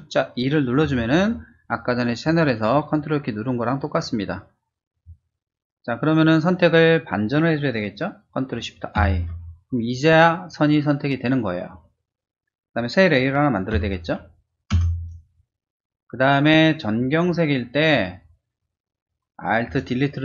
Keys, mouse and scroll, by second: 2.2 ctrl+alt+click, 4.9 ctrl+click, 14.7 ctrl+shift+Return.